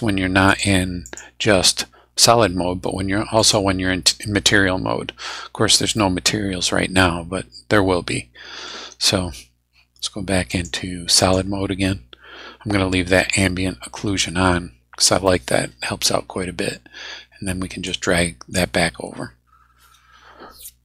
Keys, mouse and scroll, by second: 0.5 click, 1.0 click, 3.4 click, 4.8 scroll down 1, 6.0-8.9 middle drag, 10.5 click, 11.2 click, 15.2 middle click, 15.3-16.5 scroll up 5, 17.9 click.